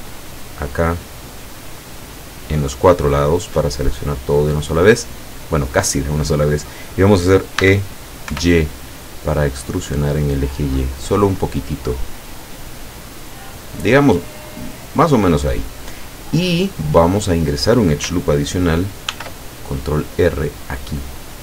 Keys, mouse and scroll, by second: 0.2 alt+shift+right click, 1.9 alt+shift+right click, 3.1 alt+shift+right click, 7.7 e, 8.3 y, 15.5 click, 15.9 middle click, 19.1 ctrl+r, 20.7 click.